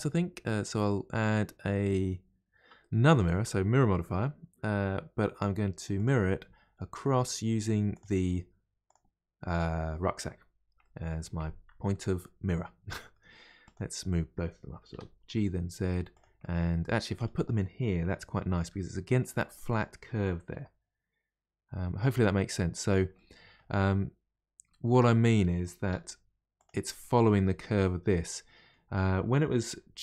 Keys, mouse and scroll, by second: 3.1-6.1 drag, 7.9 click, 10.8-11.4 middle drag, 11.4 scroll down 3, 11.9-13.6 middle drag, 13.6 click, 14.9 g, 16.4-18.6 middle drag, 18.6 r, 23.1-23.8 middle drag, 23.8 scroll up 2, 24.7 scroll up 3, 24.7-25.9 shift+middle drag, 25.9 r, 26.9-29.6 middle drag, 29.6 g.